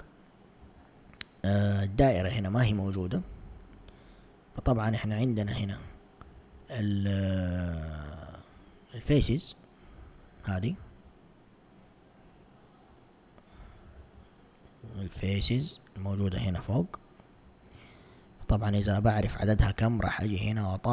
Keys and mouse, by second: 0.7 z, 4.8 alt+click, 6.4 ctrl+Tab, 11.2 alt+click, 14.0 ctrl+Tab, 16.9 alt+click.